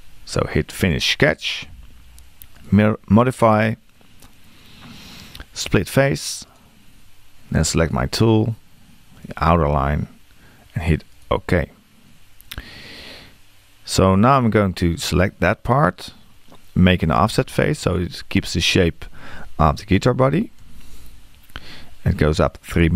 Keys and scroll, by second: 17.2 q, 20.6 3.